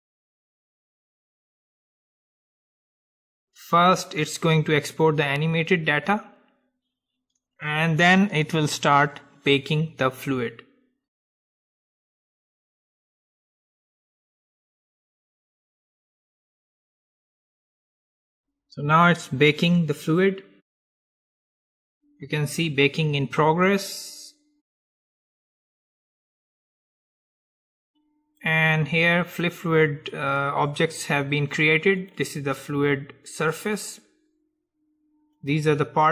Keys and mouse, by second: 0.1-2.4 drag, 12.1 middle click, 12.8 middle click, 25.5-27.5 drag, 32.1-34.2 drag, 35.5-36.1 drag.